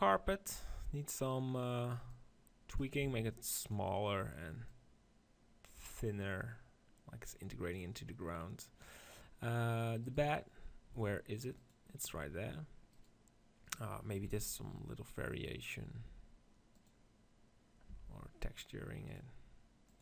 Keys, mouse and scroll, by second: 2.0 middle click, 2.9 s, 5.3-6.3 drag, 9.9 right click, 10.9-13.4 drag, 11.5 right click, 12.9-15.5 right drag, 14.2 r, 16.7-18.5 drag, 17.8 Tab, 18.9 click.